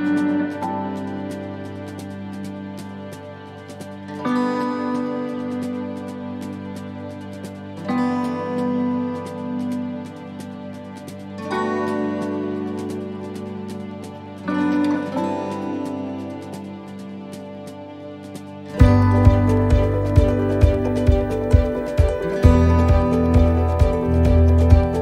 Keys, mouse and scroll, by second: 0.1 shift+middle click, 1.9 click, 7.8 s, 9.4 middle click, 10.2 shift+middle click, 11.2 click, 12.0 middle click, 13.0 click, 14.1 shift+middle click, 14.6-15.3 scroll up 4, 14.9 middle click, 15.3-15.7 scroll down 2, 15.7 middle click, 16.8 click, 18.9 ctrl+r, 21.9 right click, 22.4 alt+shift+right click, 23.1 middle click, 24.2 ctrl+r.